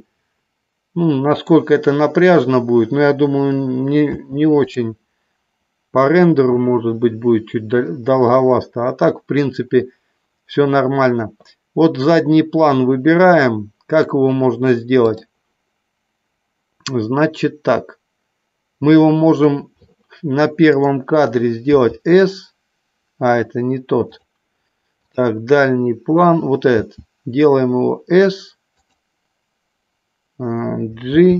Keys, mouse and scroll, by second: 0.0-1.6 middle drag, 4.4 space, 5.0 click, 6.4 click, 20.9 click, 21.8 s, 24.2 click, 25.2 click, 26.8 s, 29.0 click, 31.2 g.